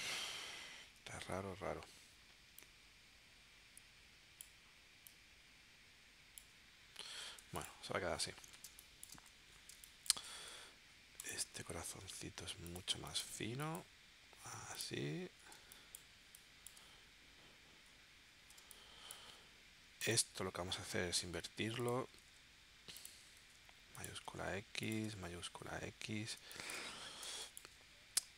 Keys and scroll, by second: 0.2 super+z, 7.4 v, 8.7 space, 9.7 space, 10.4 v, 15.5 space, 18.6 space, 21.1 shift+x, 22.2 shift+x, 23.4 shift+x, 24.2 shift+x, 25.0 shift+x, 26.4 space, 27.2 space.